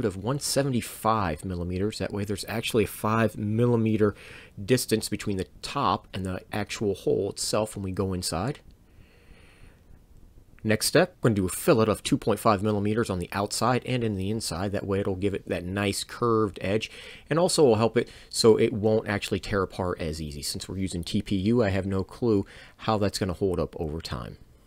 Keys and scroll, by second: 2.3 7, 2.6 5, 4.2 Return, 11.1 f, 11.1 f, 15.6 Return, 18.5 f.